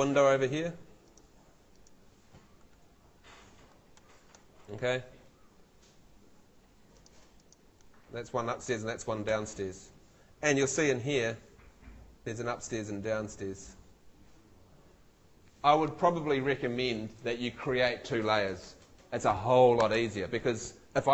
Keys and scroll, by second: 9.3 super+z, 10.8 F2.